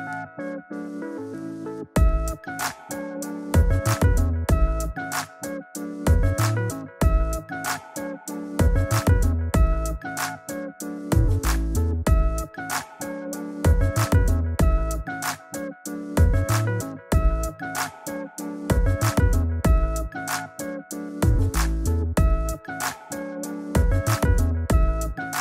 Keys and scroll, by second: 1.7 super+j, 16.7 shift+super+i, 17.1 shift+super+j, 17.8 super+j, 21.0 super+0.